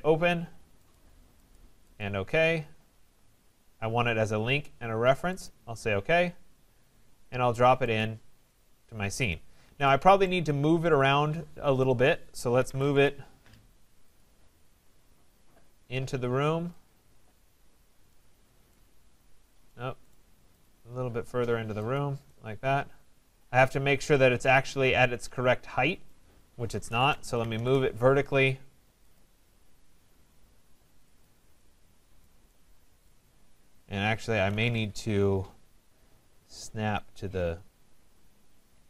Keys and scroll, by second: 12.9 Return, 27.1 Return, 34.6 Return.